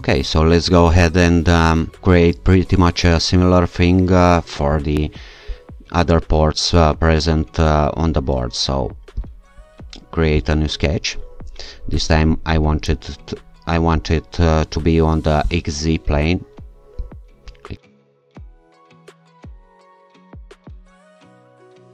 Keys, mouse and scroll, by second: 3.6-4.5 alt+shift+scroll up 2, 4.5-4.8 scroll up 1, 5.5-6.2 scroll down 2, 6.2-6.9 scroll up 2, 9.2 alt+shift+click, 10.4 click, 12.9-13.4 scroll down 2, 13.4-14.2 scroll up 2, 15.5 click, 17.0 click, 18.3 click, 18.6 click, 18.8 scroll up 1, 19.7 alt+shift+click, 20.0 click, 20.3 click, 20.7 shift+click, 20.9 click, 21.6 click, 21.8 scroll down 1.